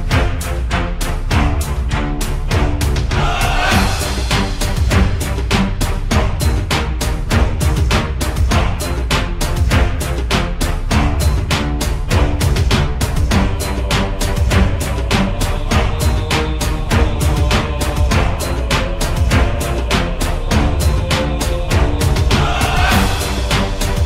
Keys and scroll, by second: 5.2-7.9 typing, 9.0-9.7 typing, 21.4 f.